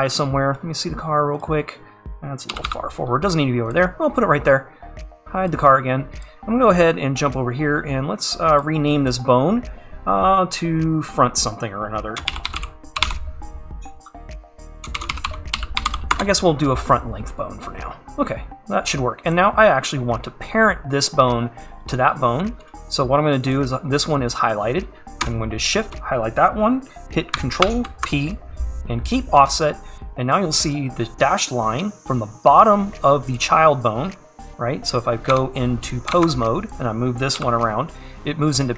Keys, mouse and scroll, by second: 1.4-2.6 drag, 2.6 g, 5.5 click, 16.2-19.4 drag, 20.1 scroll up 1, 20.7-23.4 scroll down 1, 28.8 shift+click, 33.4 click, 35.4 Tab, 36.1 click, 37.4 g.